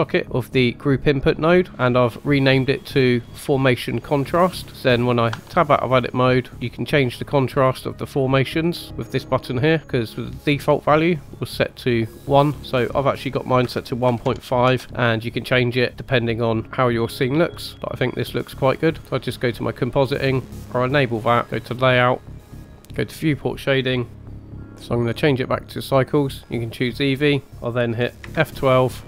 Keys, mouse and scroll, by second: 1.7-2.1 scroll up 5, 2.1 middle click, 5.0 scroll down 2, 5.2 Tab, 6.1 middle click, 6.5 scroll up 2, 7.4 click, 8.6 click, 9.8 click, 11.0 click, 12.7 click, 15.7-16.0 middle drag, 17.7-18.1 scroll up 2, 18.6-19.6 scroll down 3, 21.9 click, 22.9-24.1 drag, 25.1-26.3 drag.